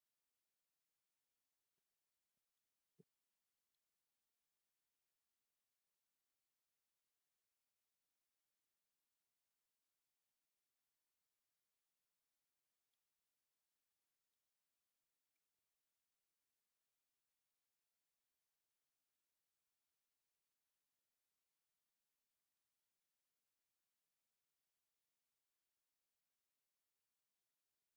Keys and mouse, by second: 2.1 middle click, 3.6 middle click, 5.7 click, 12.6 middle click, 13.8 middle click, 15.7 ctrl+shift+click, 16.7 click, 17.9-21.5 drag, 22.3 middle click, 25.7 middle click, 27.0 click.